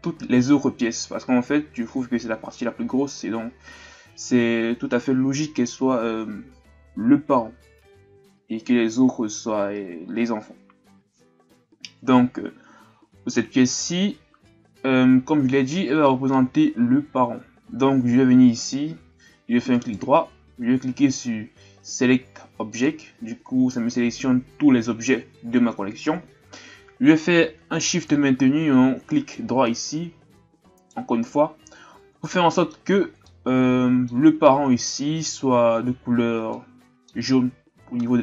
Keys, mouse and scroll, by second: 12.9-13.6 scroll up 2, 13.6-16.7 shift+scroll up 2, 18.6 click, 19.7-22.9 right drag, 29.2 shift+right click, 30.8 shift+right click, 32.2 scroll up 1, 32.3-38.2 middle drag.